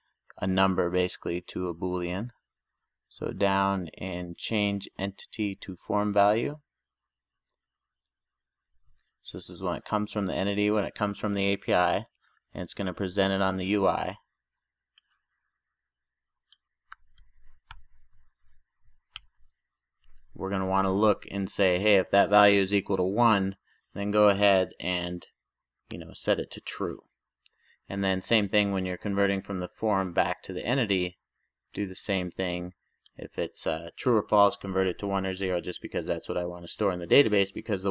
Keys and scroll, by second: 17.9 super+j, 19.2 Return.